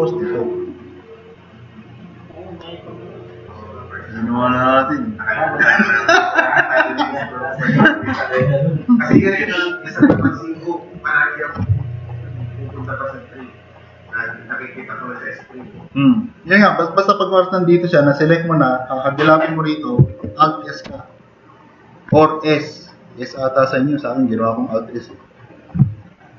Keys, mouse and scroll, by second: 8.2 super+-, 11.3 click, 16.8 click, 20.9 alt+s.